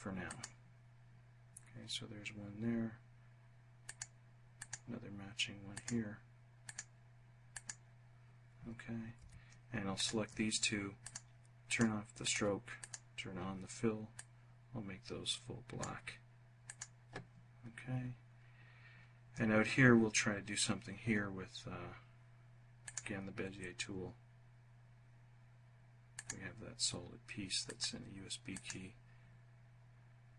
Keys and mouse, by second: 3.5 click, 4.2 click, 5.4 click, 6.3 click, 7.1 click, 8.8 F1, 9.6 shift+click, 10.6 click, 11.3 click, 11.9 click, 12.4 click, 13.8-15.5 drag, 16.3 click, 22.4 click, 25.7 click, 27.2 click, 28.1 click, 30.0 click.